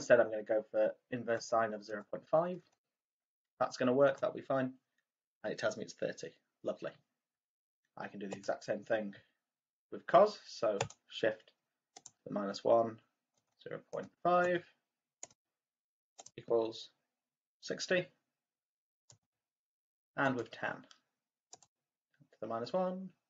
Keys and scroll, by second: 1.3 0, 1.9 ., 2.6 5, 4.0 =, 13.3-16.1 typing.